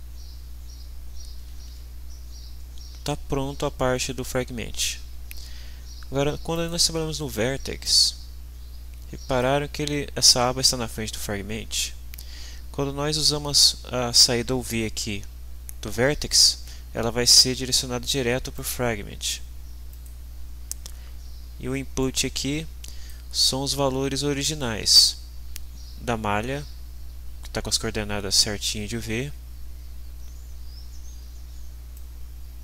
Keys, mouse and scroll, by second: 1.7 ctrl+s, 6.5 click, 7.8-9.6 drag, 18.5 click, 19.9 click, 22.0-23.3 drag, 31.9-32.6 drag.